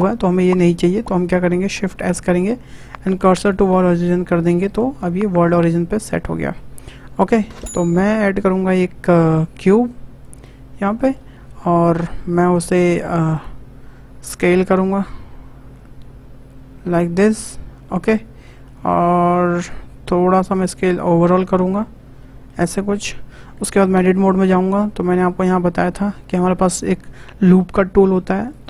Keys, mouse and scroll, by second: 0.6 Delete, 1.8 shift+s, 4.1-4.5 shift+scroll up 4, 4.5-5.0 shift+middle drag, 5.0-5.9 scroll up 8, 5.9-6.4 scroll down 5, 6.4 shift+middle click, 7.0 scroll up 1, 7.3-8.7 shift+middle drag, 8.7 shift+a, 10.8-13.3 shift+middle drag, 13.3-14.4 drag, 17.7-18.1 scroll up 4, 18.1 scroll down 2, 18.4 s, 20.3 s, 21.3 scroll down 4, 21.6-21.9 shift+middle drag, 21.9 scroll up 1, 22.2-22.6 shift+middle drag, 22.6-23.1 scroll up 1, 23.9 Tab, 28.5-28.6 drag.